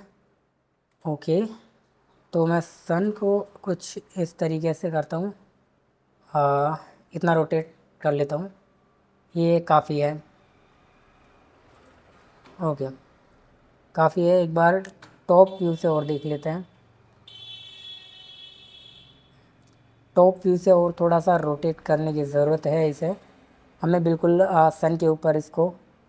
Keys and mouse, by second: 0.9 click, 2.9 r, 11.8 click, 15.0 KP_7, 20.8 r, 24.7 click.